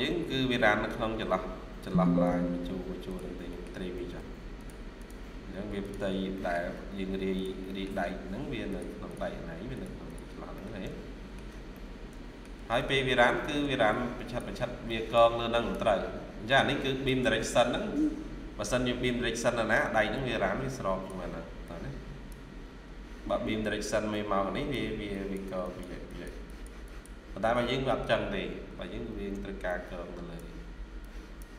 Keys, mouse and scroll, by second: 0.2 scroll up 1, 1.7 Tab, 2.1 Tab, 3.4 middle click, 3.8 typing, 4.8 double click, 5.1 scroll down 1, 6.2 middle click, 7.6 middle click, 9.0 double click, 10.4 middle click, 11.6 middle click, 12.3 shift+scroll down 1, 12.6 middle click, 13.3 ctrl+q, 19.1-20.1 scroll up 1, 26.0 double click, 27.5 Escape, 29.0 ctrl+q.